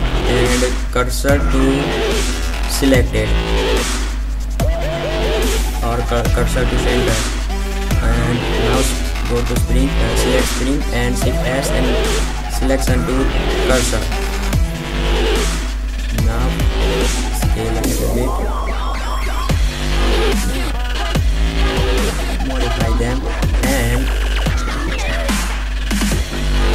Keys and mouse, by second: 9.7 shift+s, 14.0 KP_Decimal, 17.8 s, 20.0 click, 20.7 ctrl+z, 21.0 Tab, 21.5 click, 22.7 Tab, 25.6 middle click.